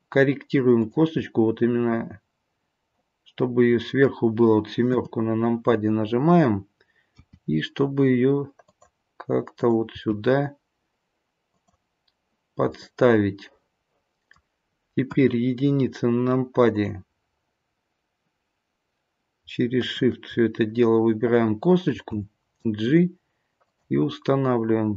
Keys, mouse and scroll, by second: 1.2 middle click, 3.6 middle click, 4.9 KP_7, 7.1 g, 9.5 click, 9.9 g, 12.9 middle click, 15.1 KP_1, 16.7 click, 19.8 shift+click, 21.9 g.